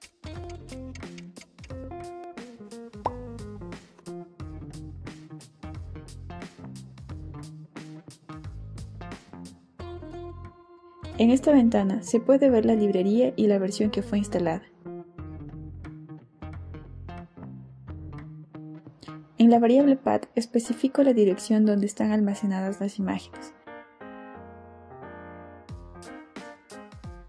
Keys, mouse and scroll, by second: 10.6 click, 12.4 click, 16.1 click, 18.2 click, 19.2 Return, 20.6 Return, 21.3-22.6 typing, 23.7 BackSpace, 26.1 click, 26.7 click.